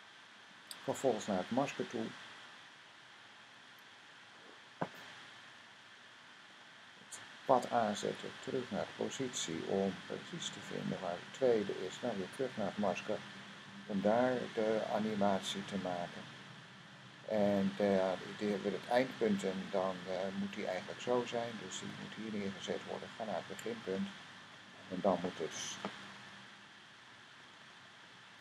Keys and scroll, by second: 3.2 m, 8.7 p, 12.1 m.